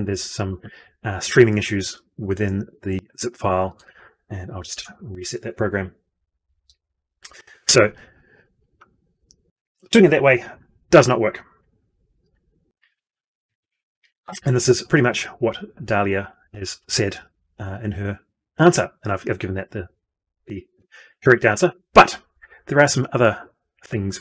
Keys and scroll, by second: 4.6 ctrl+F2.